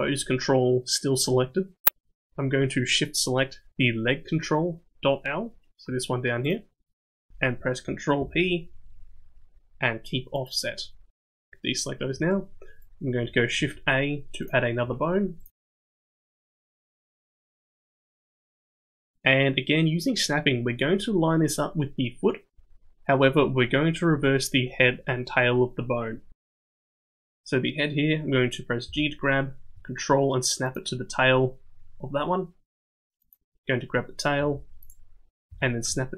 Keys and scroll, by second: 8.1 ctrl+p, 13.5 shift+a, 14.8 s, 15.5 g, 28.8 g, 34.4 g, 35.4 g.